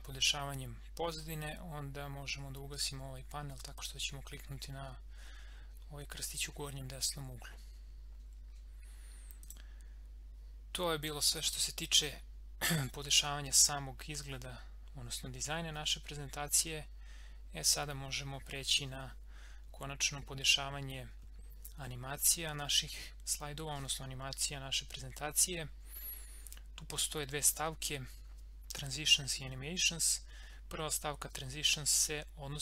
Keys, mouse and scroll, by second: 3.7 click, 9.4 click.